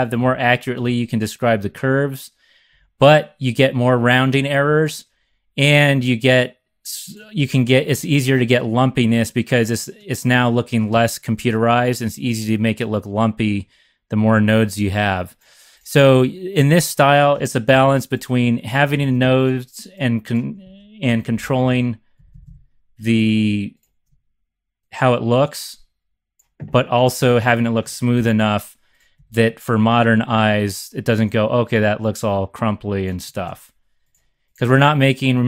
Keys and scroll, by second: 0.2 Up, 0.8 x, 2.7 z, 17.7 shift+super+c, 21.0 c, 21.4 Left, 21.5 Left, 22.1 Left, 28.1 shift+super+c, 29.1 x, 30.2 z, 33.5 super+z.